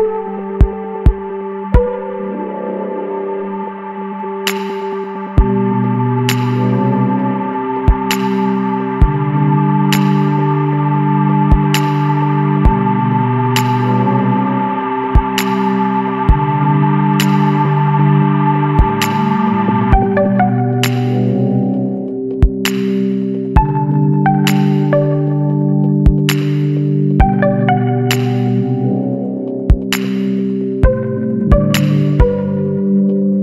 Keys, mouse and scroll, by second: 0.7 alt+a, 1.2 click, 1.5-2.0 middle drag, 2.0 s, 3.8-4.1 middle drag, 4.1-4.6 scroll up 2, 4.6 ctrl+s, 4.8 scroll down 1, 5.0 middle drag, 5.2-5.7 scroll up 2, 5.7-6.3 middle drag, 6.3 click, 6.8 scroll down 2, 7.0-9.2 middle drag, 9.2-12.3 drag, 12.4-15.8 middle drag, 17.0-18.1 shift+middle drag, 18.1 click, 18.3 Tab, 18.7-19.5 scroll up 2, 19.0 shift+middle click, 19.5 middle click, 20.2-20.6 scroll up 1, 20.6-22.5 middle drag, 22.5 ctrl+r, 26.7 scroll down 1, 26.8-28.0 shift+middle drag, 28.0 shift+d.